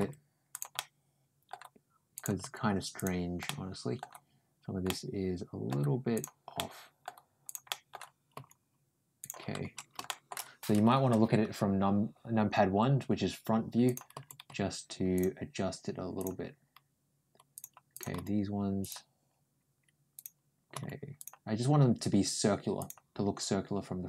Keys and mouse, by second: 0.6 middle click, 2.0 click, 2.3 g, 3.3 middle click, 4.7 middle click, 6.0 click, 6.4 middle click, 7.3 click, 7.5 middle click, 8.2 g, 9.9 middle click, 13.7 click, 14.0 g, 16.0 click, 17.4 click, 17.8 click, 20.0 click, 20.6 g, 22.6 click.